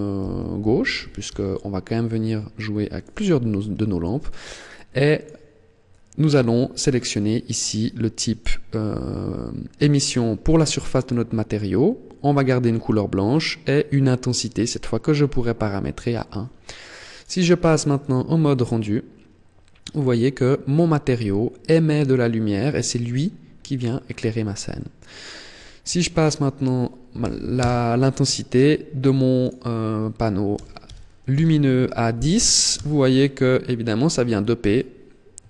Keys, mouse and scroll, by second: 4.9 click, 16.9 click, 23.1-23.8 scroll up 3, 23.8 shift+middle click, 25.3 click, 28.5 click, 34.2 KP_0.